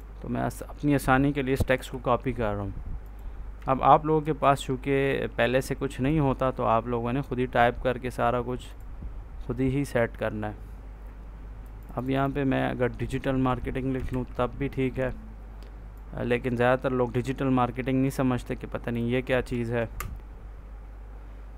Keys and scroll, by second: 1.6 ctrl+c, 4.1 ctrl+v, 14.0 ctrl+s, 19.8 space.